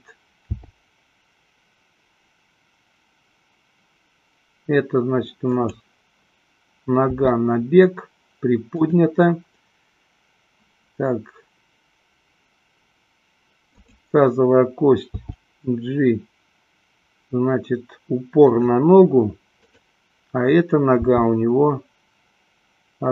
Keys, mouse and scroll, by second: 0.9 g, 5.9 click, 7.4 r, 13.8 click, 15.5 g, 19.9 click, 21.4 g.